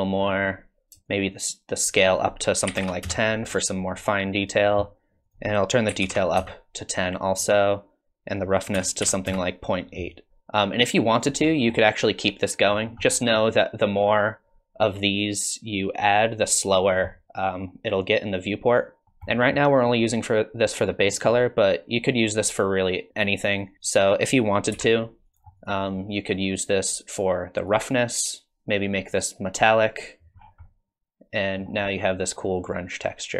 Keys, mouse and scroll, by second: 0.2 scroll up 3, 1.0 shift+click, 2.2 click, 5.9 click, 10.3 shift+middle click, 10.3 scroll down 5, 10.6 click, 11.5 middle click, 12.7-13.4 scroll down 9, 15.7 click, 16.8 scroll up 2, 17.1 middle click, 19.0 shift+middle click, 19.0 scroll up 5, 19.3 middle click, 24.1 click, 24.7 g, 25.6 click, 26.4 click, 28.3 click, 30.3 scroll down 3, 30.7 middle click, 31.8 scroll up 1.